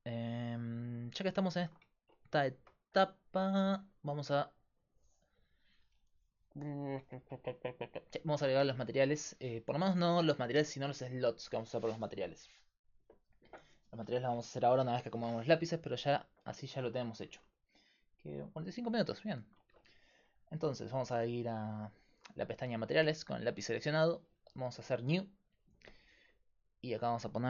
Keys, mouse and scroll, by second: 18.9-20.6 middle drag, 20.6-23.5 drag, 23.5-25.8 right drag, 24.9-26.8 drag, 25.2 middle click, 26.8-27.4 right drag.